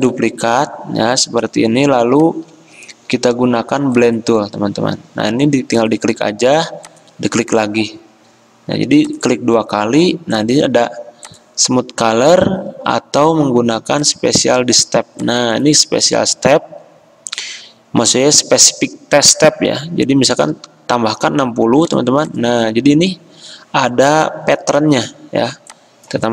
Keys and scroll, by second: 20.2-20.5 typing.